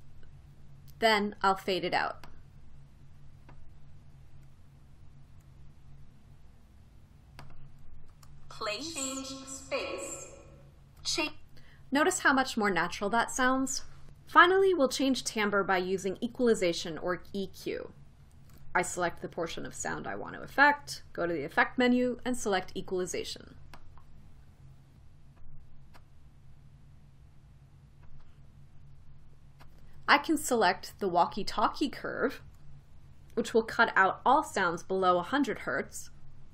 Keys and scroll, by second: 8.9 space, 9.7 space, 11.7 space.